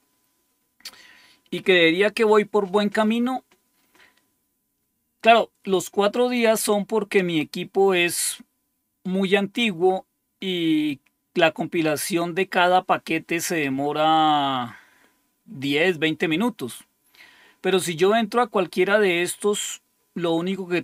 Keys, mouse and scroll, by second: 4.3-5.3 scroll down 2, 6.8-7.6 scroll down 2, 7.6-8.5 scroll down 1, 9.0-11.2 scroll down 2, 18.9-20.1 scroll down 2.